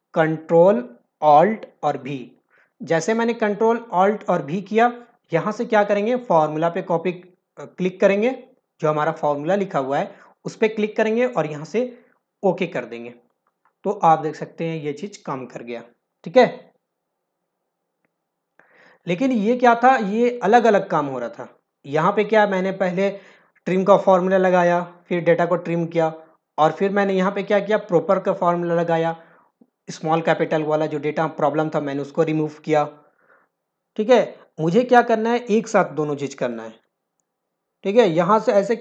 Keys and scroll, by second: 20.1 ctrl+alt+v, 37.0 ctrl+alt+v.